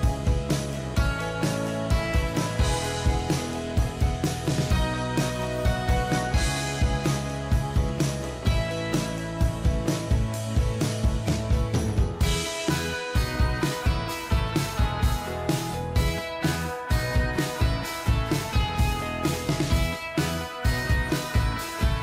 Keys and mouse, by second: 1.0 shift+click, 3.1 Up, 3.7-4.4 Up, 4.5 Up, 4.8 Up, 5.0 Up, 5.2 Up, 5.4 Up, 5.6 Up, 6.0 Down, 6.6 Down, 7.1 Down, 7.5 Down, 8.0 Down, 9.0 Down, 9.6 ctrl+t, 11.2 shift+click, 14.2 shift+click, 14.8 right click, 19.1 ctrl+click.